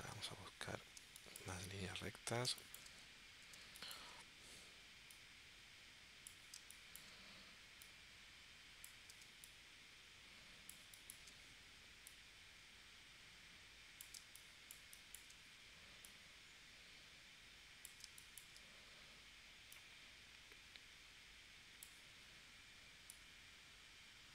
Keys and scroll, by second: 1.2 space, 2.5 space, 3.6 space, 6.6 space, 9.2 space, 14.2 space, 18.1 space.